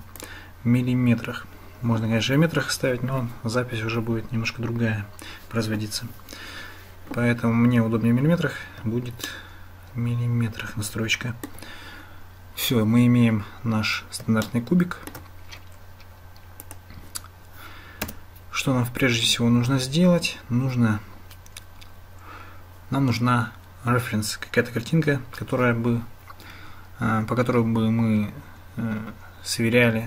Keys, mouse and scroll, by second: 9.3-11.5 shift+drag, 14.5-15.2 shift+drag, 16.7 click, 18.1 Tab, 20.7 Tab.